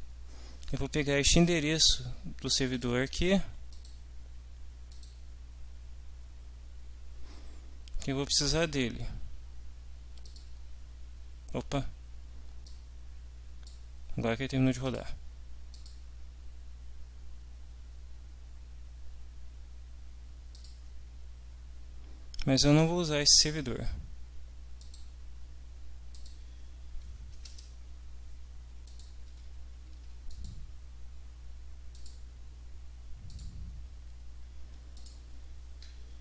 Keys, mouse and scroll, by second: 2.7 click, 3.7 click, 4.9 click, 10.3 click, 12.7-13.9 drag, 14.9 click, 15.7 click, 20.5 click, 22.6 click, 24.8 click, 26.1 click, 27.5 Return, 28.9 ctrl+click, 29.3 ctrl+c, 29.9 ctrl+z, 30.3 ctrl+click, 31.9 click, 33.3 click, 35.0 click.